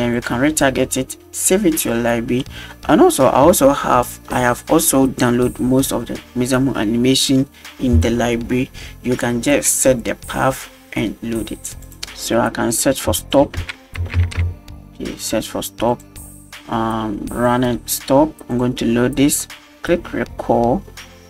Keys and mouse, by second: 0.2 click, 11.8 click, 12.7 click, 13.2-15.2 drag, 15.9-17.5 drag, 18.5-18.9 drag.